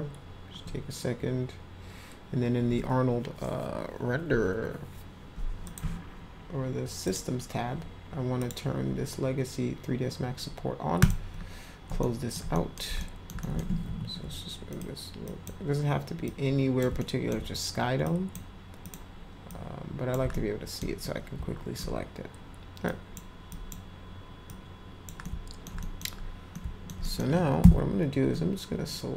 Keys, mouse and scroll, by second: 5.6 click, 7.1 click, 8.4 click, 11.0 click, 12.0 alt+middle click, 12.5 middle drag, 13.0 alt+middle click, 13.4 middle click, 13.8 w, 14.7 click, 15.2 click, 16.3 click, 17.0 alt+middle click, 18.0 drag, 18.8 click, 19.4 click, 20.3-20.8 alt+middle drag, 21.0 middle click, 22.8-23.1 drag, 23.5 drag, 24.5 click, 25.2 alt+middle click, 25.8 middle drag, 26.5 alt+middle click, 27.0 middle click.